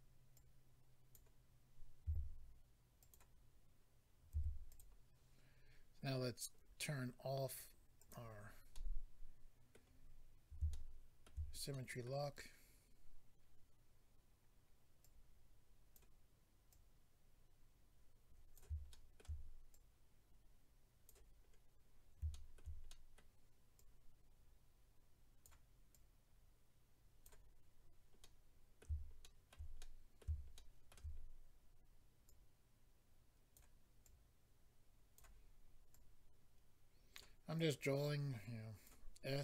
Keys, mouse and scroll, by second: 0.3 click, 2.0 f, 3.0 click, 3.1 click, 4.3 f, 4.7 click, 4.8 click, 6.1-7.0 scroll down 4, 7.4-7.8 scroll down 1, 8.0 click, 8.1 click, 8.7 middle click, 10.7 shift+middle click, 11.7 middle click, 15.0 click, 16.7 click, 18.9 shift+middle click, 19.7 click, 21.4-22.3 scroll down 3, 22.3 shift+middle click, 22.8 middle click, 23.8 click, 25.9 click, 27.7-28.2 scroll down 1, 28.2 middle click, 29.2 shift+middle click, 29.5 middle click, 29.8 middle click, 31.1 scroll up 2, 32.2 click, 34.0 click, 35.9 click, 37.5 click.